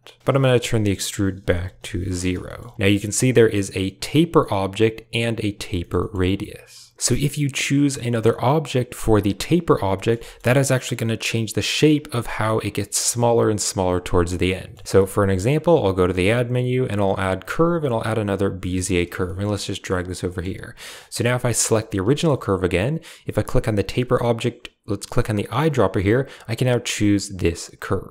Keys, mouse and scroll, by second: 0.6 click, 2.3 shift+middle click, 5.7 shift+click, 5.9 click, 9.8 drag, 10.1 shift+drag, 14.4 drag, 14.8 shift+click, 15.6 shift+a, 19.1 g, 20.2 shift+click, 20.7 drag, 21.5 right drag, 22.0 shift+click, 27.8-28.1 typing.